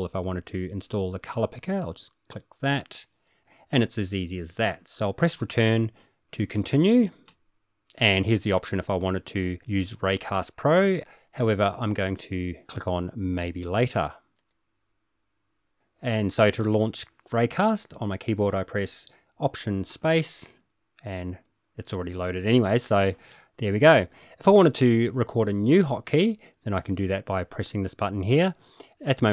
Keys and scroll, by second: 7.2 Return, 19.9 alt+space.